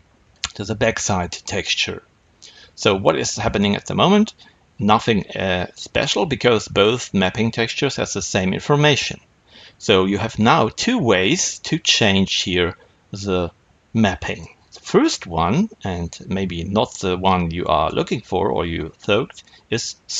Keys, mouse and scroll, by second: 0.9-17.1 middle drag, 17.1-20.1 drag.